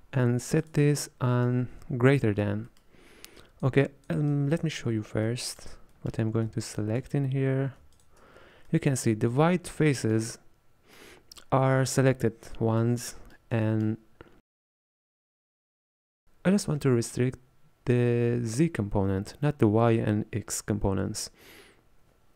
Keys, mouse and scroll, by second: 1.4-3.5 middle drag, 3.9-4.4 drag, 5.1 scroll down 1, 5.3-6.8 middle drag, 6.8 ctrl+shift+click, 8.0 ctrl+shift+click, 8.8-14.3 middle drag, 14.3-14.6 scroll up 3, 14.6-16.2 middle drag.